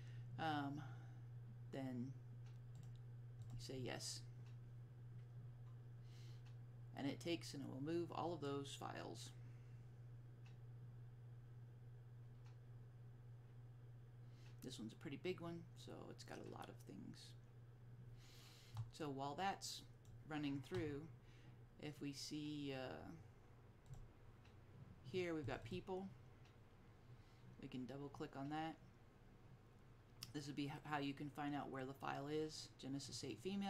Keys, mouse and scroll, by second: 2.9 click, 20.1-21.9 drag, 25.6 click, 25.7 double click, 33.2 double click.